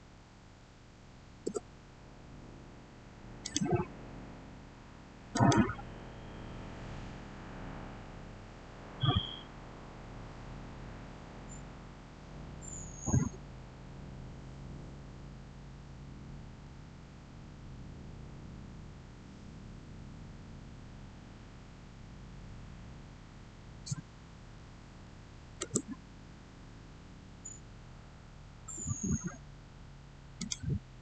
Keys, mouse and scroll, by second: 0.8 8, 1.3 Return, 3.3 click, 24.6-25.0 typing, 25.4 Return, 27.3-27.9 scroll up 1, 30.2 click.